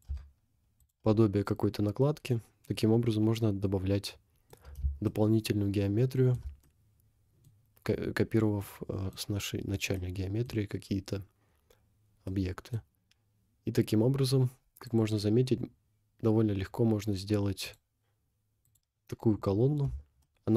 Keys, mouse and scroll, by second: 0.1 Tab, 0.5 scroll down 1, 0.8 click, 1.2-1.9 scroll down 6, 2.3 scroll up 2, 2.7 middle click, 5.1-6.2 shift+middle drag, 6.6 middle click, 8.6 middle click, 9.6-9.9 scroll down 1, 9.9 middle click, 11.5 scroll down 2, 12.4 middle click, 13.9-14.7 scroll up 2, 14.9 click, 16.7-17.0 scroll down 1, 17.7 click, 18.7 click, 19.4 scroll down 2, 20.2 shift+middle click.